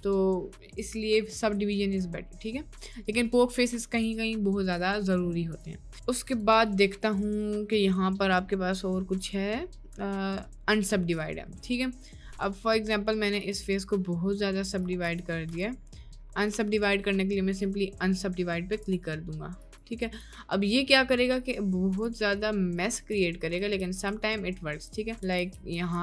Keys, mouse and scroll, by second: 1.9 middle click, 2.5 middle click, 5.2 middle click, 5.5 click, 6.2 3, 6.7-10.7 right drag, 11.1 middle click, 12.0 middle click, 13.9 right click, 14.9 right click, 15.4 right click, 16.7-19.1 right drag, 19.7 right click, 21.0 middle click, 21.5 right click, 22.7 right click, 23.5 right click, 23.9 ctrl+z, 24.1 ctrl+z, 24.3 ctrl+z, 24.7 ctrl+z, 25.1 ctrl+z, 25.7 ctrl+z.